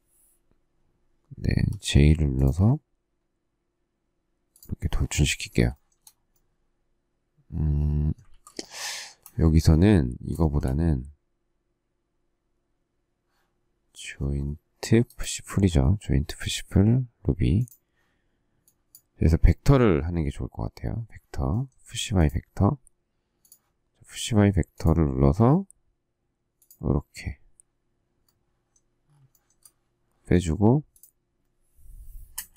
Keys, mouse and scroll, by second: 1.5 j, 5.7 shift+middle click, 8.2 ctrl+z, 9.4 space, 10.3 shift+middle click, 29.2 shift+middle click, 32.3 Return.